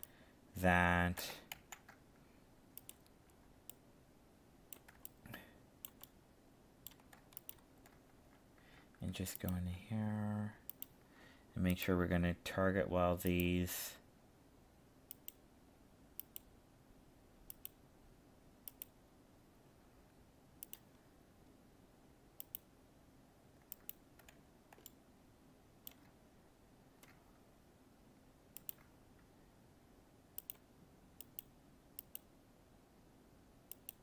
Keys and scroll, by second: 1.6 ctrl+z.